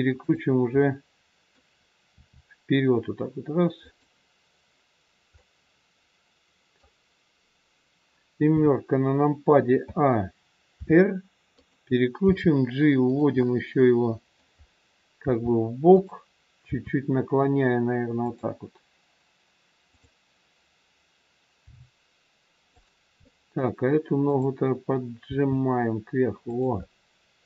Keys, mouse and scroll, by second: 0.1 click, 0.9 middle click, 2.1 r, 5.3 middle click, 8.4 KP_7, 9.7 a, 10.7 r, 12.2 g, 13.2 scroll up 1, 13.4 middle click, 14.5 scroll down 2, 15.2 g, 16.6 r, 19.8 click, 21.6 g, 23.2 middle click, 24.2 click, 25.2 g, 26.7 middle click.